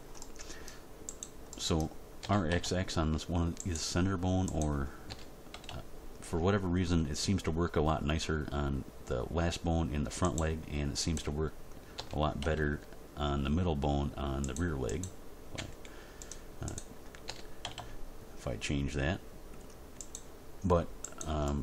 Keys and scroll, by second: 2.2 r, 2.5 x, 5.1 r, 5.5 x, 11.9 r, 12.3 x, 15.5 g, 17.2 r, 17.6 x.